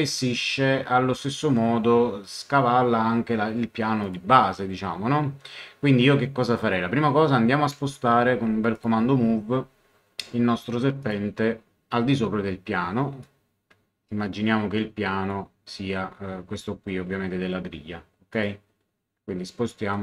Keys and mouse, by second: 4.0 click, 7.7 m, 8.7 click, 11.0 click, 13.2 click, 18.3 click, 19.9 click.